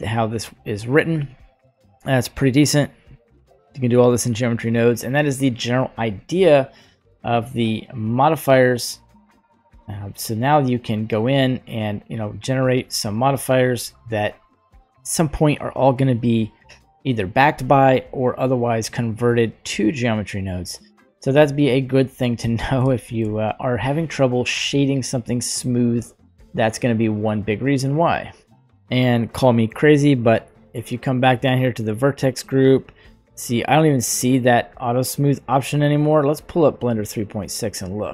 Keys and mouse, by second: 0.6 click, 1.4-2.4 middle drag, 2.8 click, 3.1 click, 7.2 click, 8.6-11.3 drag, 12.2-16.1 drag, 16.5 right click, 20.6 click, 21.7-22.4 middle drag, 22.9-23.3 shift+middle drag, 24.6-25.7 middle drag, 29.0-29.8 middle drag, 31.7 click.